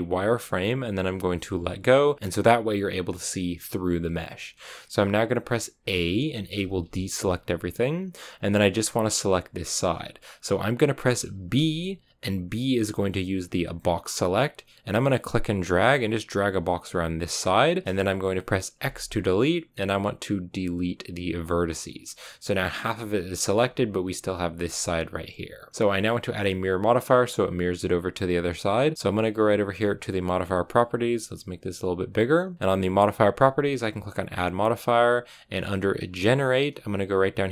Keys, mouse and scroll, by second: 5.7 a, 6.4 a, 6.7 a, 21.4 x, 23.5 a, 24.5 a, 31.0-37.5 drag.